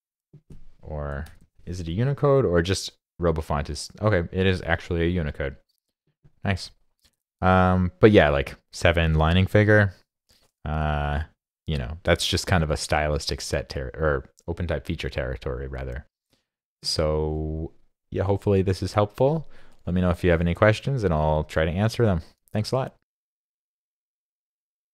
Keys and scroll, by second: 1.3 super+i.